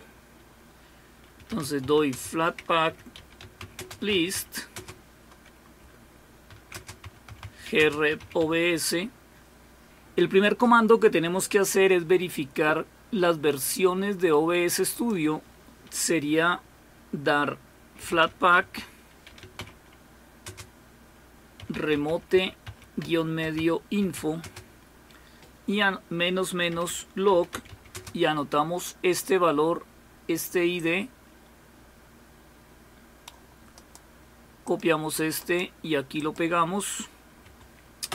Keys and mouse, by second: 2.1-4.8 typing, 6.5-8.7 typing, 14.9 click, 19.2-24.7 typing, 27.1-28.4 typing, 30.8-33.9 drag, 33.9 right click, 34.7 click, 35.5 right click, 36.2 click.